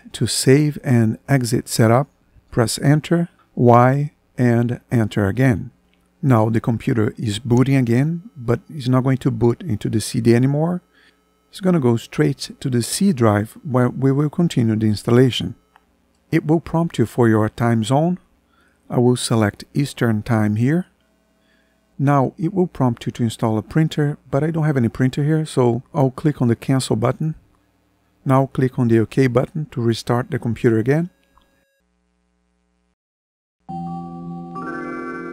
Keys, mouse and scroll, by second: 2.2 Return, 3.5 y, 4.7 Return.